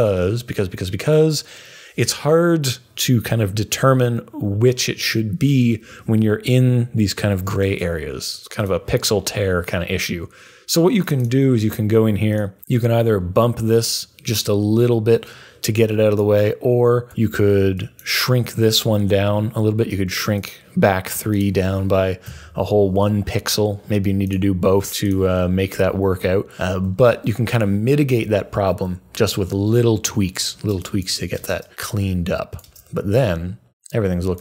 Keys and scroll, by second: 17.1 u, 22.2 Down, 24.4 scroll down 1.